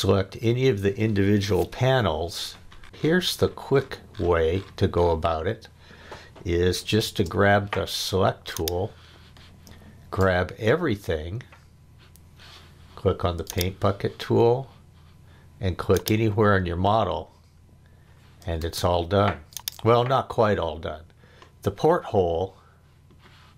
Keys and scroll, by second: 7.0 space, 18.6 space.